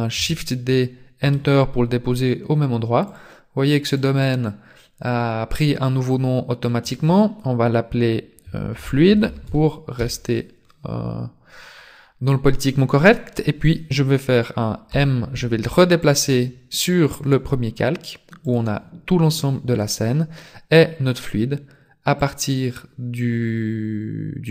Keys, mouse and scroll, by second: 0.2 shift+d, 3.1 click, 3.9 click, 14.9 m, 18.4 click, 22.1 click.